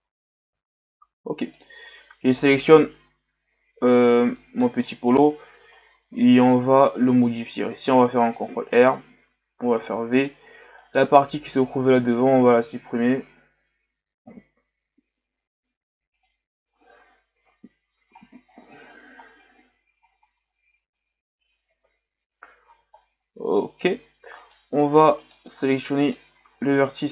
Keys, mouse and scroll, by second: 0.8 Tab, 1.4 right click, 2.9 KP_Divide, 3.9-4.4 ctrl+scroll up 5, 4.4-4.7 middle drag, 4.7-6.1 scroll up 8, 6.1 Tab, 6.6-7.7 scroll up 2, 7.7 ctrl+r, 9.6 v, 10.8 right click, 13.1 l, 14.4 Delete, 17.3 KP_1, 18.2-19.9 scroll down 18, 20.0-21.2 shift+scroll up 7, 21.8 KP_Divide, 23.0-24.4 scroll up 8, 24.4 alt+right click, 25.2 alt+right click, 25.9 alt+right click.